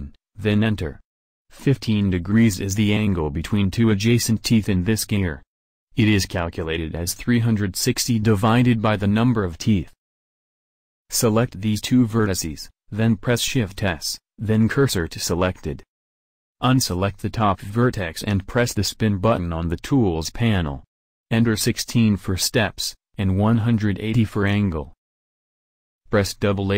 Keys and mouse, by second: 14.7 shift+s, 24.5 a, 26.3 a.